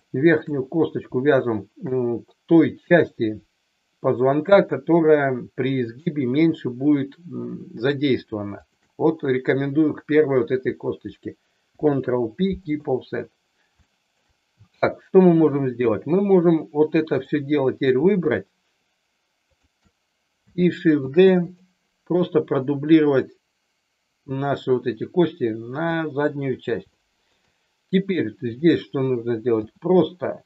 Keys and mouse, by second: 0.0 shift+middle click, 8.6 shift+click, 11.6 ctrl+p, 13.9 shift+middle click, 16.4 click, 19.6 shift+click, 21.0 shift+d, 21.4 click, 22.3-25.9 drag, 26.9 shift+middle click, 29.5 g.